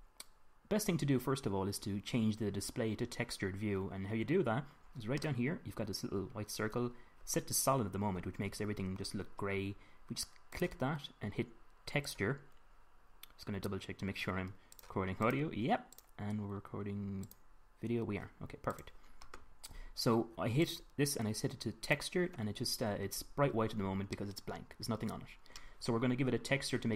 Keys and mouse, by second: 10.8 click, 12.9-20.4 middle drag, 21.0-21.4 drag, 21.9-22.9 drag, 24.5-26.9 middle drag.